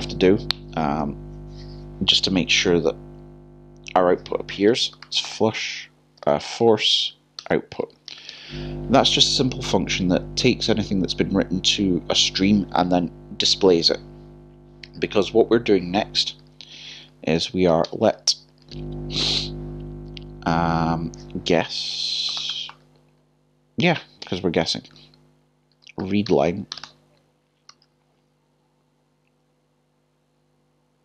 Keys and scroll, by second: 6.2-7.9 typing, 24.2 typing, 25.6-28.0 typing.